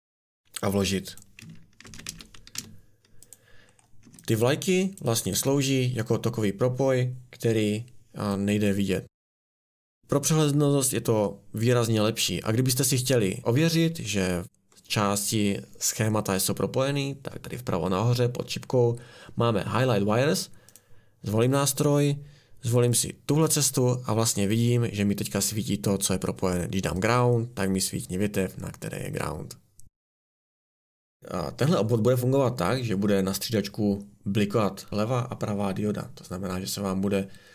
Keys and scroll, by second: 1.8 ctrl+c, 2.0 ctrl+v, 2.5 r, 4.0 Escape.